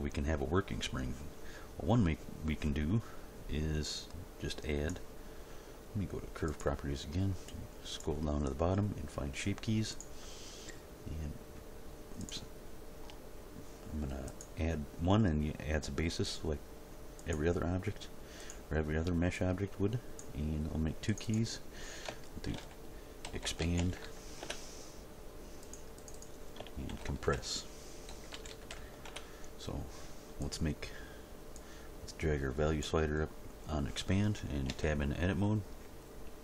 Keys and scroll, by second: 22.5-24.0 typing, 24.4 Return, 26.9-28.7 typing, 29.1 Return, 34.6 Tab.